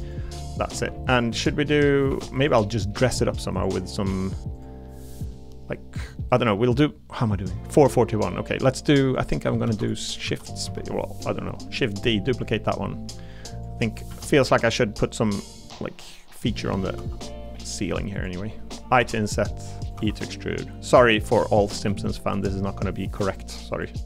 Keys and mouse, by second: 0.0 click, 0.5 middle click, 0.7 3, 1.3 middle click, 2.1 3, 2.4 click, 2.7 middle click, 3.9 middle click, 4.9 click, 5.3 middle click, 6.2 middle click, 7.9 middle click, 8.3 middle click, 9.6 shift+d, 10.2 s, 10.6 x, 12.5 click, 14.4 y, 16.4 click, 17.0 e, 19.0 i, 19.8 click, 20.0 e, 20.9 click, 22.0 shift+click, 23.7 click.